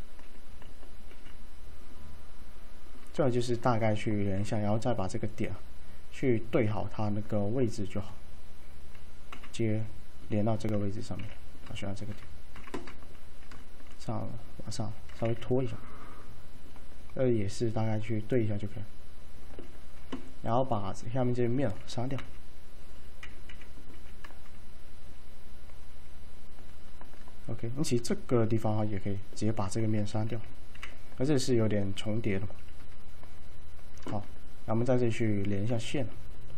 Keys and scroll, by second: 1.2 alt+c, 9.4 F3, 11.3 1, 12.6 F3, 22.3 F3, 23.3-24.0 typing, 30.4-30.8 typing.